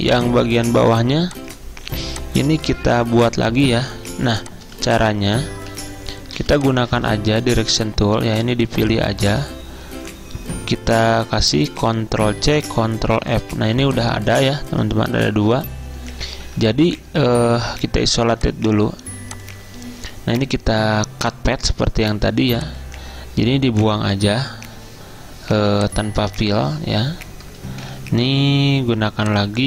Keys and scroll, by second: 0.8 v, 2.9 ctrl+z, 4.3 z, 5.5-6.2 typing, 7.4-8.1 typing, 12.5 ctrl+c, 13.2 ctrl+f, 15.2 ctrl+z, 16.5 a, 23.9 Delete, 28.4 -.